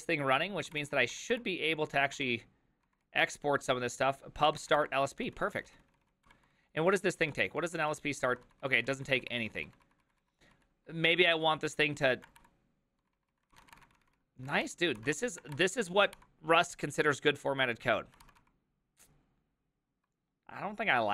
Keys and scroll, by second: 0.9 ctrl+d, 1.1 ctrl+d, 1.3 ctrl+d, 2.5 ctrl+d, 2.9-5.1 typing, 5.3 ctrl+u, 5.5 ctrl+u, 5.8 ctrl+u, 6.2 ctrl+u, 6.3 ctrl+d, 6.4 ctrl+d, 6.5 ctrl+d, 6.7 ctrl+d, 7.2 ctrl+d, 7.2 ctrl+u, 7.6-16.2 typing, 15.0 ctrl+c, 18.2 ctrl+c, 18.4 k.